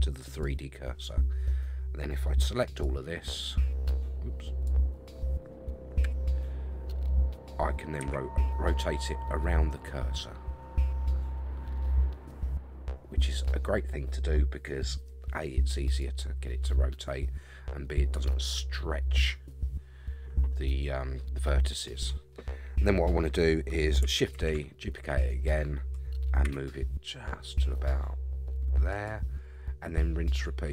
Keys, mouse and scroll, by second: 2.8-4.7 drag, 6.0 l, 8.0 r, 24.4 shift+d, 26.4 g, 29.5-30.5 scroll up 4.